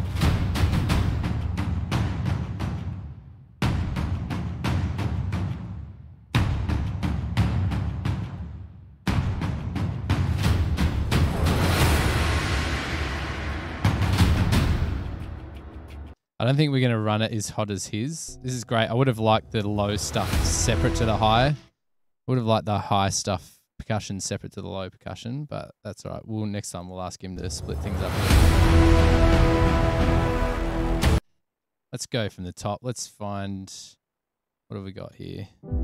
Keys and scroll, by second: 15.4 super+=, 16.2 space, 18.2 typing, 20.2 super+], 20.3 super+], 21.5 space, 27.4 space, 31.2 space, 31.4 Return, 34.1 super+], 34.2 super+].